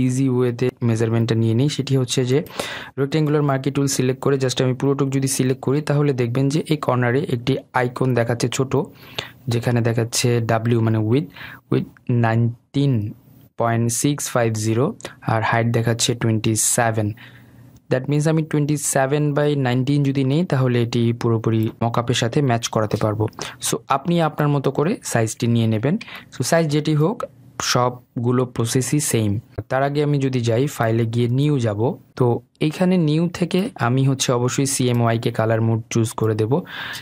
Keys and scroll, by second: 22.4 ctrl+d.